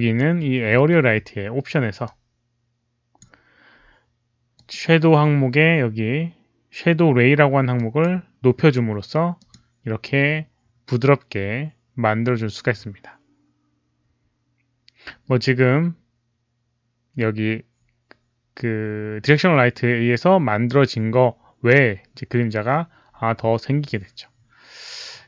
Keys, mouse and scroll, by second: 0.7 ctrl+a, 2.0-3.1 drag, 4.5 click, 7.7 click, 9.3 click, 9.3 ctrl+a.